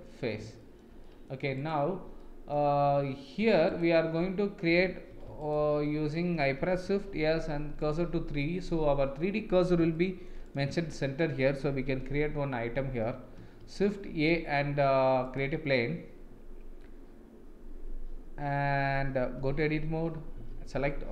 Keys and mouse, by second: 0.6 shift+middle click, 1.0 middle click, 1.6 click, 2.2 middle click, 5.1 2, 5.4 alt+click, 6.8 shift+s, 8.4 middle click, 10.0-10.3 shift+middle drag, 10.4 click, 12.0 KP_1, 13.6 shift+a, 19.5 Tab, 20.3 a.